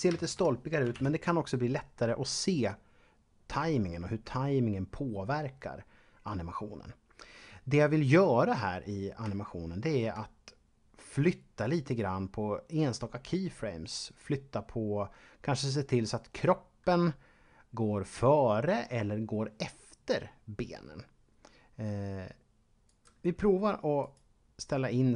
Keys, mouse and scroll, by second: 1.2-2.7 scroll up 1, 8.7-9.1 scroll up 1, 9.4 shift+middle click, 22.9 right click, 24.0 shift+right click.